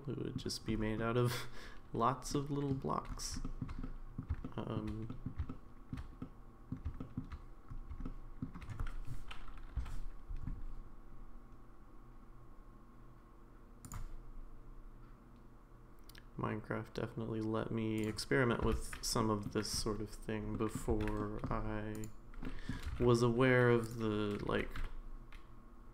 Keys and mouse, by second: 2.3 middle click, 3.4 shift+middle click, 3.8 middle click, 4.4 shift+middle click, 5.1 middle click, 5.5 shift+middle click, 6.2 middle click, 7.0 shift+middle click, 8.0 shift+middle click, 19.2 middle click, 20.5 middle click, 21.2 middle click, 21.2 1, 21.9 click, 22.4 middle click, 22.8 g, 24.5 g.